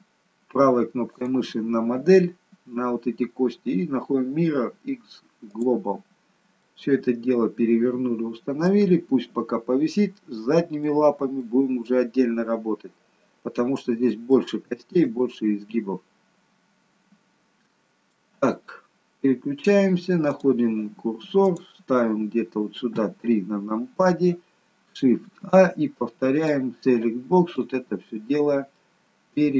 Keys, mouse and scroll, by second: 1.2 right click, 6.7 middle click, 8.9 scroll down 1, 9.6 scroll down 1, 9.9 middle click, 11.5 middle click, 12.2 scroll up 2, 14.3 shift+middle click, 15.2 middle click, 19.1-20.3 scroll down 1, 20.3 click, 21.6 click, 22.9 KP_3, 25.3 shift+a, 26.5 click, 27.6 click, 28.8 middle click.